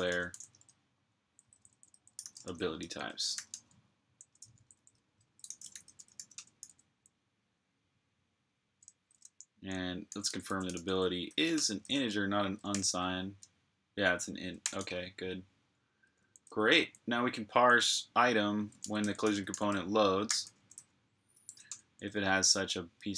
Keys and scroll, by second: 0.0-4.0 typing, 8.5-12.5 typing, 14.5 g, 15.9-16.9 typing, 18.4-20.6 typing, 22.4-23.1 typing.